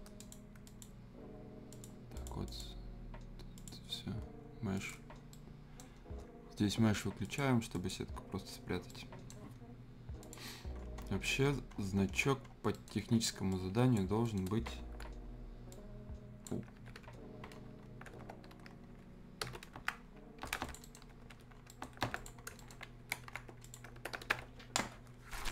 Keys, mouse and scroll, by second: 5.3-7.2 right drag, 7.2 click, 8.9-10.2 right drag, 10.2 click, 10.5-11.7 scroll down 1, 12.7 right click, 12.7 right click, 13.5 click, 14.2 right click, 15.7-17.6 drag, 17.6 scroll down 1, 17.8-18.2 scroll up 1, 19.9 scroll down 1, 20.1 scroll up 1, 20.6 click, 20.8 right click, 21.5 scroll down 1, 21.7 right click, 22.1 click, 22.4 scroll up 1, 22.6 right click, 23.6 click.